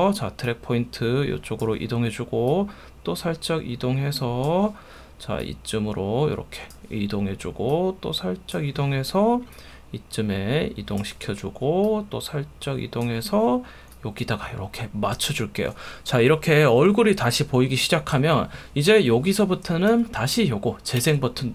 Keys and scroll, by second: 19.9 F1.